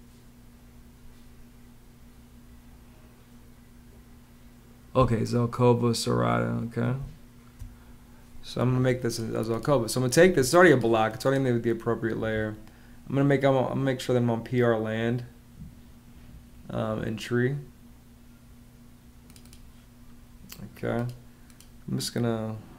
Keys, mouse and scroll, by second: 6.7 space, 10.0 Escape, 11.9 ⟲, 12.1 Escape.